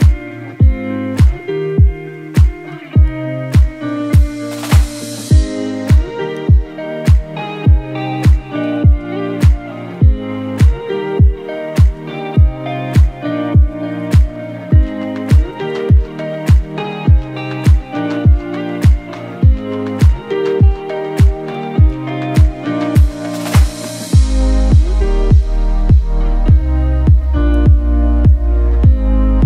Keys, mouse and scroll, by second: 15.9 click, 25.0 scroll, 25.0 scroll up 1, 25.1 scroll, 25.2 shift+click, 26.1-27.0 scroll down 1, 27.6 click.